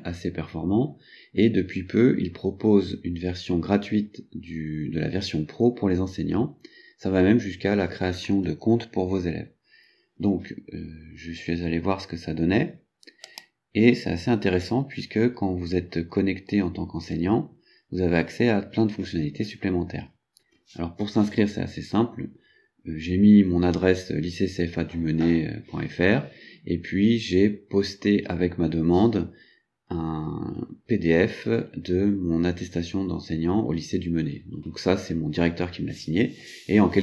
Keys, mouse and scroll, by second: 13.4 click.